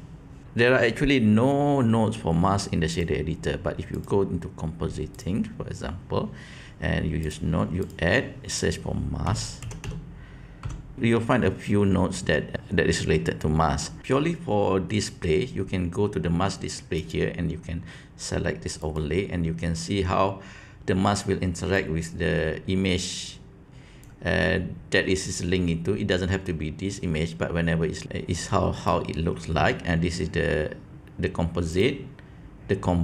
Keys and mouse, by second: 5.1 click, 7.2 click, 7.7-14.0 drag, 16.9-19.2 drag, 21.8-23.9 drag, 28.0-28.9 drag, 31.7-33.0 drag.